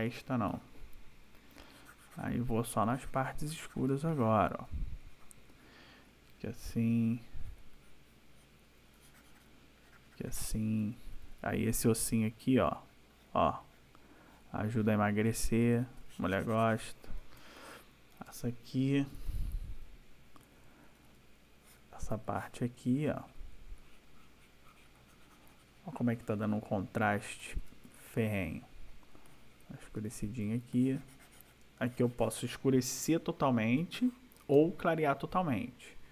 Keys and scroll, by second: 3.9 space, 6.1 ], 8.7 ], 10.8 \, 15.6 \, 17.4 space, 19.1 \, 27.3 \, 30.0 ], 33.8 space.